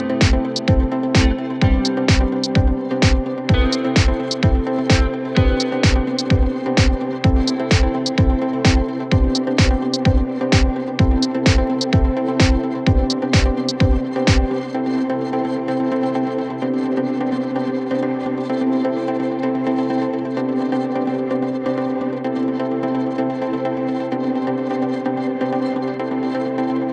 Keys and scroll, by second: 5.2 Delete, 11.0 w, 18.6 shift+Page_Down.